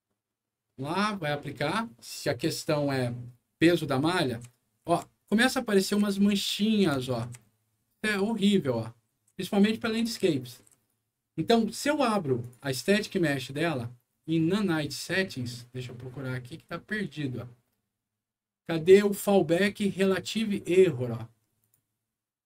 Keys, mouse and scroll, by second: 4.0-8.1 right drag, 4.2-8.0 typing, 9.0-10.8 right drag, 9.0 a, 9.9 w, 10.6 s, 12.3 click, 12.5 click, 18.0 scroll down 2, 21.5 click.